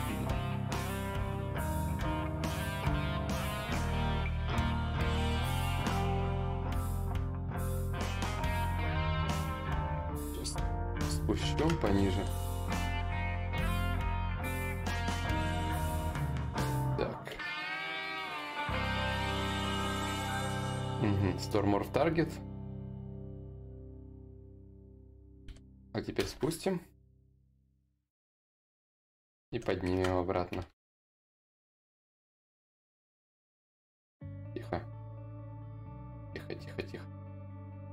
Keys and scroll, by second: 3.0 f, 5.9 ctrl+y, 5.9 z, 7.3 shift+d, 7.7 shift+d, 11.7 shift+d, 15.1 d, 16.9 d, 18.9 d, 24.2 shift+d, 24.4 shift+d, 24.8 shift+d, 26.8 d, 27.4 d, 28.9 d, 31.2 d.